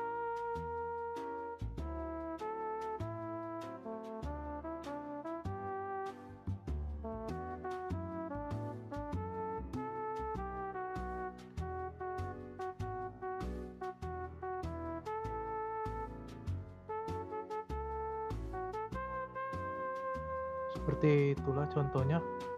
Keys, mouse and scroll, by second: 1.8 middle click, 2.1 r, 15.8-16.9 middle drag, 16.9 drag, 17.2 space, 19.1-19.9 drag, 19.9 scroll down 2, 20.0-22.5 middle drag.